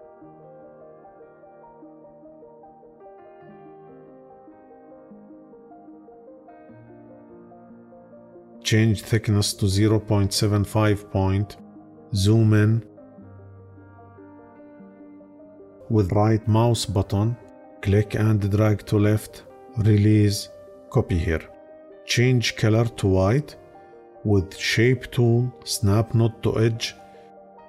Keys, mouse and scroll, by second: 15.7-20.7 right drag.